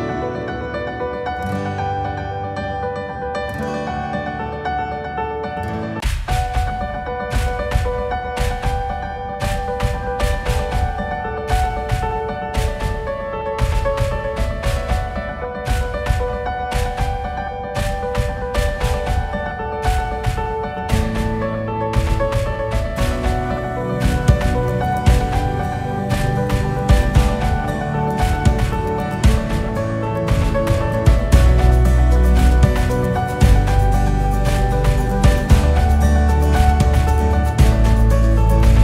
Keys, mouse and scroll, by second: 0.1 scroll down 2, 0.4-0.7 scroll up 1, 0.7-1.5 scroll down 1, 1.5 click, 2.3-3.1 scroll down 3, 3.1 click, 3.3-4.0 scroll up 1, 4.0-6.8 drag, 6.8 ctrl+z, 7.0 ctrl+z, 8.1-10.7 drag, 13.8-15.3 drag, 16.8-17.3 scroll down 4, 17.3-18.1 scroll up 1, 18.1 ctrl+z, 19.1 f, 20.5-34.7 drag, 34.9-36.4 drag, 36.5-38.0 scroll down 1, 38.4-38.8 drag.